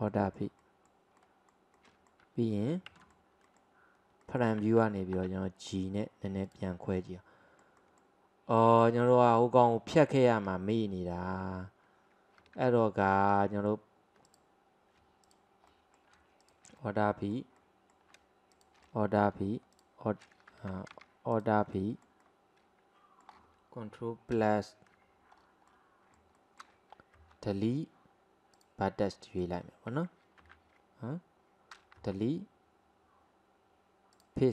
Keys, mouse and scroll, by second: 0.1-3.1 middle drag, 3.5 alt+middle drag, 4.3 alt+middle click, 5.2 g, 7.0-12.2 middle drag, 12.7 ctrl+z, 13.4 middle click, 14.3 click, 15.3 alt+click, 15.7 alt+middle click, 16.5 alt+shift+click, 16.8-18.6 middle drag, 18.6 alt+shift+click, 18.9 middle click, 19.7 alt+shift+click, 20.6 ctrl+z, 21.4 alt+shift+click, 21.8-24.4 middle drag, 24.4 KP_Add, 25.4-25.7 scroll down 1, 25.7-27.2 middle drag, 27.2 Delete, 29.2 middle click, 29.7-30.6 scroll down 1, 30.6 ctrl+z, 32.0 Delete.